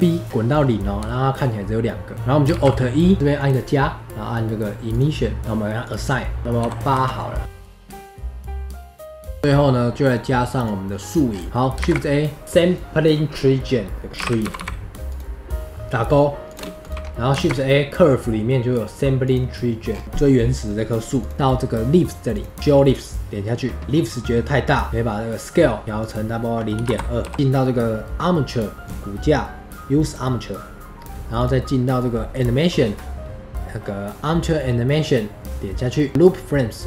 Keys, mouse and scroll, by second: 2.1 middle click, 2.5 alt+e, 3.2 shift+middle click, 3.3 click, 7.5 scroll down 4, 7.6 middle click, 7.6 KP_0, 7.7 click, 7.7 middle click, 7.8 click, 8.0 middle click, 8.0 click, 8.1 middle click, 8.4 click, 8.5 scroll up 4, 8.6 click, 8.7 middle click, 8.8 scroll down 1, 8.8 shift+middle click, 9.1 middle click, 9.3 space, 9.3 shift+middle click, 9.4 space, 10.6 click, 11.3 scroll down 4, 11.5 middle click, 11.8 shift+a, 17.3 shift+a, 19.9 scroll up 3, 20.0-22.4 drag, 27.3-30.6 drag, 32.4-35.6 drag, 35.6 click.